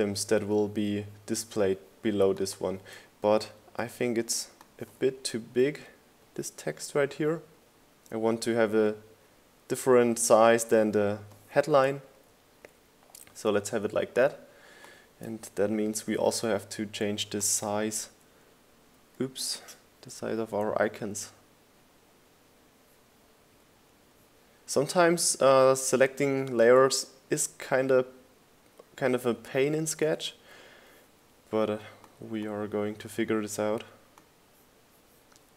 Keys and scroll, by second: 6.8 Down, 13.4 Down, 13.8 Up, 14.3 Down, 19.6 Down, 20.6 Up, 31.2 Down, 32.3 Up.